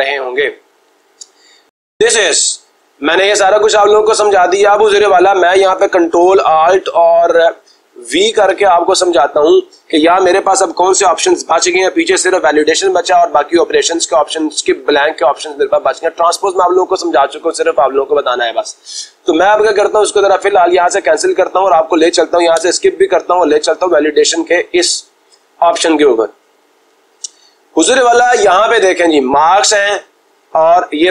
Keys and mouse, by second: 2.7-3.8 drag, 20.4-21.4 drag, 22.4 Escape, 24.5 click, 29.6 click.